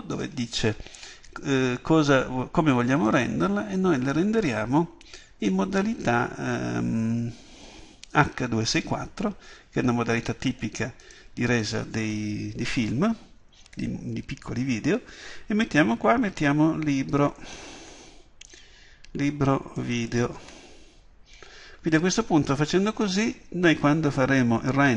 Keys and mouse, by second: 4.8-11.1 middle drag, 11.1-13.0 drag.